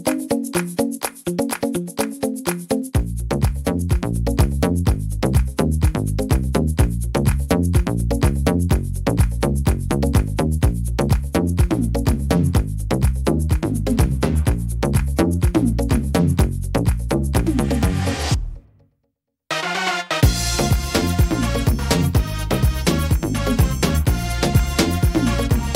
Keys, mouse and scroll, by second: 0.6 right click, 1.2 alt+shift+right click, 2.1 right click, 2.5 middle click, 4.0 alt+shift+right click, 4.9 alt+shift+right click, 6.0 x, 8.6 right click, 9.8 l, 10.4 x, 12.0 right click, 12.9 l, 13.4 middle click, 14.7 click, 17.2 middle click, 19.3 scroll down 2, 19.6 middle click, 20.9 s, 23.9 middle click, 23.9 click.